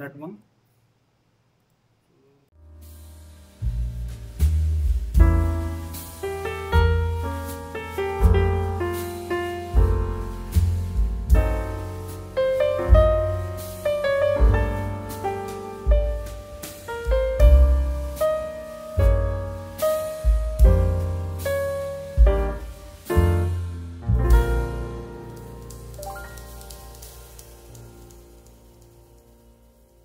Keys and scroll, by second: 25.1 ctrl+s.